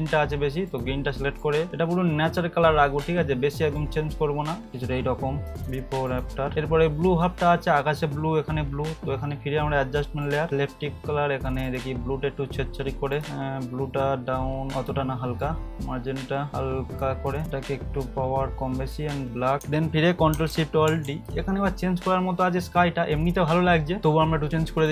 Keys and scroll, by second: 20.9 ctrl+alt+shift+e.